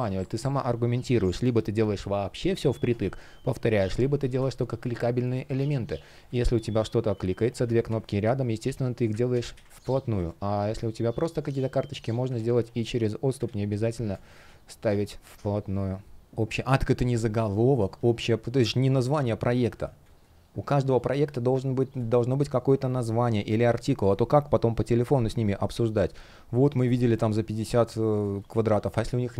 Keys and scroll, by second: 4.0 space, 6.3 shift+p, 7.5 super+z, 9.0 super+z, 9.5 space, 12.0 super+z, 13.1 super+z, 13.8 space, 16.2 space, 17.9 space, 27.9 space.